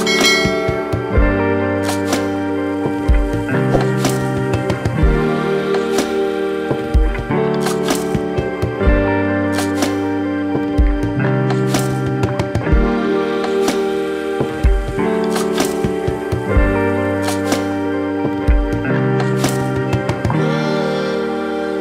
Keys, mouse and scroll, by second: 0.9 middle click, 3.5 click, 3.8 shift+middle click, 6.7 s, 12.2 scroll up 3, 12.4 shift+middle click, 12.7 middle click, 14.2 click, 15.7 shift+middle click, 16.1 middle click, 17.3 click, 17.8 shift+click, 18.0 middle click, 18.4 middle click, 18.9 ctrl+z, 19.1 middle click, 20.7 shift+click, 21.0 middle click.